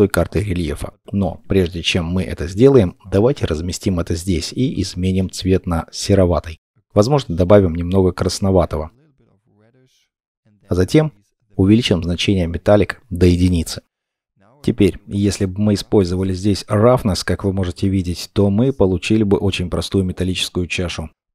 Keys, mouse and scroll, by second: 3.4-5.1 scroll up 1, 17.0-17.4 scroll down 1, 17.4 middle click, 17.5-20.3 scroll up 1.